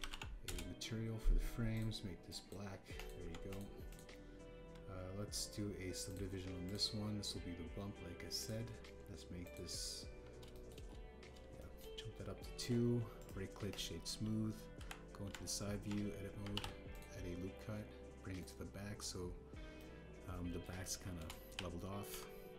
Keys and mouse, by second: 2.7 click, 3.9 click, 4.2 Tab, 4.4 click, 4.8 click, 7.0 click, 7.7-9.4 drag, 10.4 middle click, 11.5 shift+middle drag, 12.5 shift+middle drag, 14.1 click, 15.7 KP_3, 16.2 Tab, 17.5 ctrl+r, 20.7 middle click, 21.7 shift+click, 22.4 KP_3.